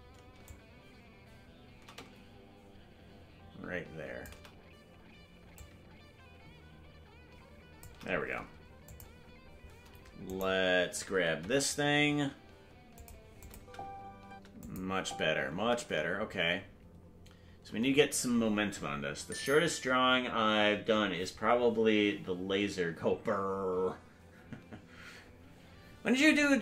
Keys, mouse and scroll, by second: 0.4-4.2 shift+drag, 5.5-7.8 drag, 8.8 click, 10.2-11.3 right drag, 11.3 g, 13.4 click, 13.5 space, 14.6 click, 14.8 space.